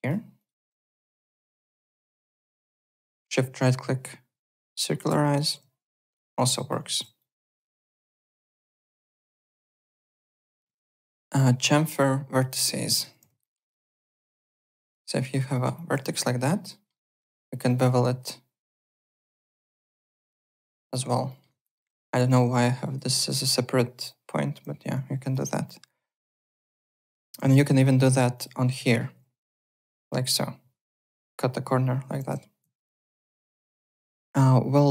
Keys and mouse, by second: 0.3 n, 0.4 shift+click, 0.8 click, 0.9 Tab, 1.2 click, 2.3 Tab, 3.2 right click, 5.4 w, 5.9 alt+click, 6.3 alt+middle click, 6.5 alt+click, 7.2 shift+click, 7.6 alt+click, 9.2 alt+right click, 9.5 alt+Tab, 9.8 alt+click, 12.0 alt+Tab, 12.3 alt+click, 12.5 alt+middle click, 13.0 1, 13.4 alt+middle click, 13.6 alt+right click, 13.8 alt+middle click, 14.1 alt+click, 14.4 alt+middle click, 14.6 alt+right click, 15.3 click, 15.5 alt+middle click, 15.7 alt+click, 16.0 alt+right click, 16.2 alt+middle click, 16.9 alt+right click, 17.6 click, 18.7 click, 20.2 w, 20.4 alt+click, 20.5 alt+right click, 20.9 alt+click, 21.3 alt+middle click, 21.5 alt+right click, 22.6 alt+middle click, 22.8 alt+right click, 24.8 alt+Tab, 25.2 alt+click, 27.1 alt+Tab, 27.5 alt+right click, 27.8 alt+middle click, 28.3 click, 28.8 alt+middle click, 29.5 click, 31.0 click, 32.2 w, 32.6 alt+Tab.